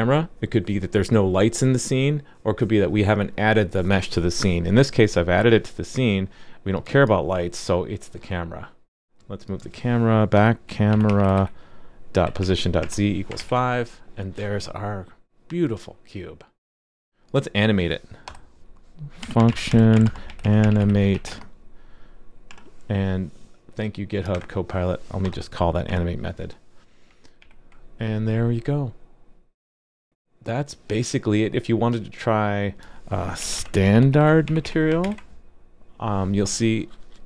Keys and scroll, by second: 13.4 super+s, 27.4 super+s, 35.0 super+s.